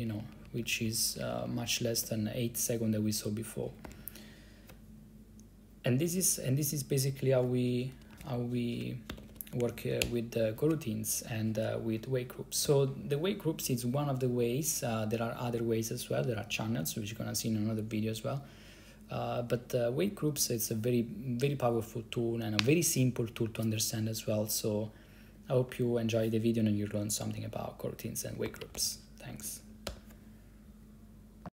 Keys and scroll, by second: 4.0 ctrl+c, 7.8-9.7 typing, 10.1 Return, 28.6 ctrl+c, 28.9-29.9 typing, 30.0 Return.